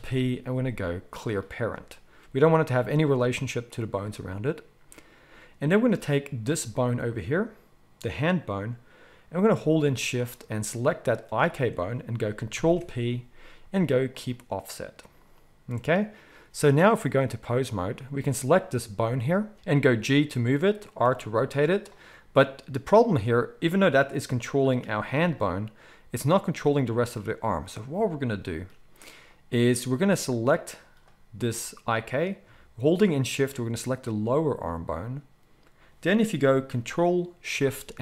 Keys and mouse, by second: 2.2 g, 12.5 ctrl+p, 17.2-18.2 drag, 18.2-30.4 middle drag, 19.5 ctrl+s, 19.7 g, 21.0 r, 24.8 r, 30.4 click, 30.6-33.9 middle drag, 33.9 shift+click, 33.9-38.0 shift+middle drag.